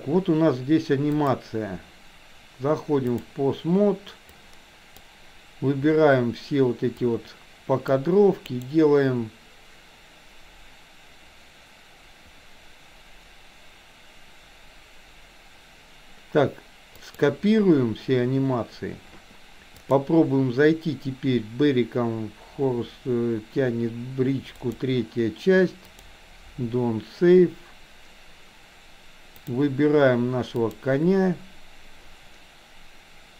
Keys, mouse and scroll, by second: 1.1-3.4 drag, 4.2 click, 6.9-8.0 drag, 8.5-18.0 right drag, 19.9-27.2 drag, 30.6 click.